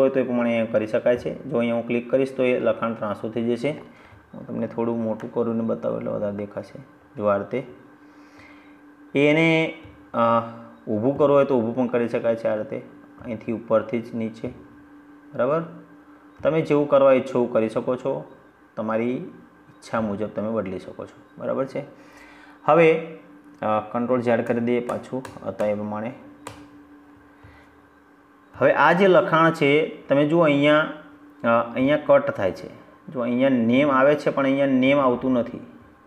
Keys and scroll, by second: 23.3 ctrl+z.